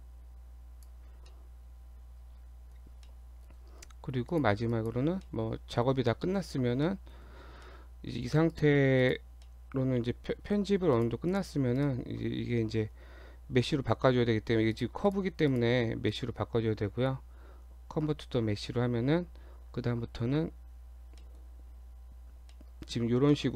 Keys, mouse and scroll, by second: 1.1-1.5 scroll down 2, 1.3 middle click, 2.8 scroll up 1, 3.1 middle click, 3.9 Tab, 4.3 click, 4.7 click, 5.3 middle click, 6.3 shift+middle click, 6.6 scroll up 2, 6.9 middle click, 7.7 middle click, 8.5 click, 9.0 click, 9.5 middle click, 11.0 click, 11.3 click, 11.7 right click, 14.7 click, 15.1 click, 15.5 click, 16.1 right click, 21.2 middle click, 22.1 Tab, 22.6 middle click, 22.8-23.3 scroll up 3, 23.3 middle click.